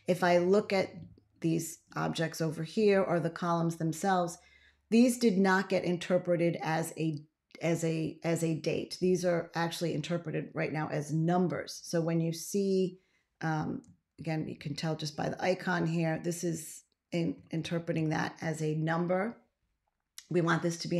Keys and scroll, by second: 14.0 ctrl+a, 17.8 ctrl+x.